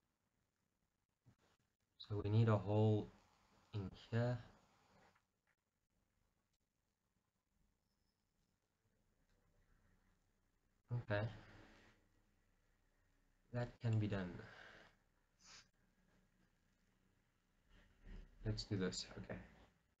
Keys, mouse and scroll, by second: 1.1-4.3 middle drag, 4.4-20.0 middle drag.